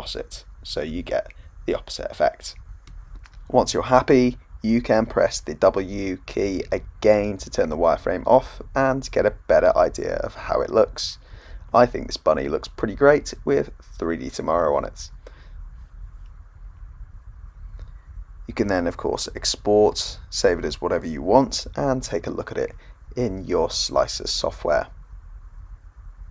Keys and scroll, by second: 3.3 w, 14.5-14.8 typing, 16.6-18.2 typing, 20.0 Return.